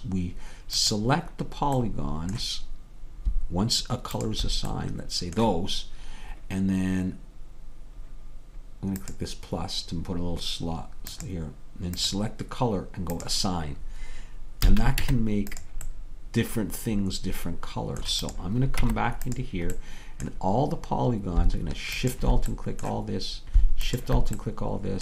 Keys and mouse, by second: 5.6-7.6 drag, 5.6-7.6 right drag, 11.2-15.1 drag, 14.7 a, 15.1 Tab, 18.5 click, 18.9 Tab, 22.1-25.0 drag, 22.6-25.0 middle drag, 22.6-24.3 right drag.